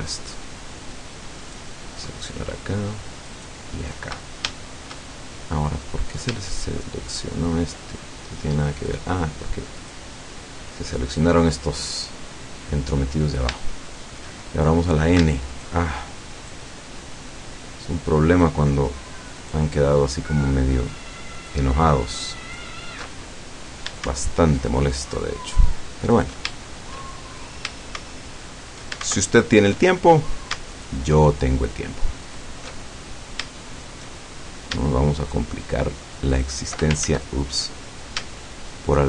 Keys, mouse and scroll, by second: 1.4 alt+shift+right click, 3.4 alt+shift+right click, 4.6-6.0 shift+middle drag, 6.0 scroll up 1, 7.2 shift+right click, 8.8 shift+right click, 9.8 shift+right click, 11.2 shift+right click, 12.3-13.0 scroll down 2, 13.0-14.4 middle drag, 15.6 alt+shift+right click, 16.4 alt+shift+right click, 18.4 alt+shift+right click, 19.4 alt+shift+right click, 21.4 alt+shift+right click, 22.5 alt+shift+right click, 23.1 alt+shift+middle click, 24.9 alt+shift+right click, 26.1 alt+shift+right click, 26.6-27.7 alt+shift+middle drag, 28.2-28.8 alt+shift+middle drag, 29.4-29.9 alt+shift+middle drag, 30.3 scroll up 1, 30.8 alt+shift+right click, 32.3 alt+shift+right click, 32.8-33.4 alt+shift+scroll down 1, 33.6 shift+middle click, 34.2-34.5 shift+scroll up 1, 35.3 alt+shift+right click, 36.4 alt+shift+right click, 37.1 ctrl+alt+shift+z, 37.4-38.2 ctrl+alt+shift+scroll up 3.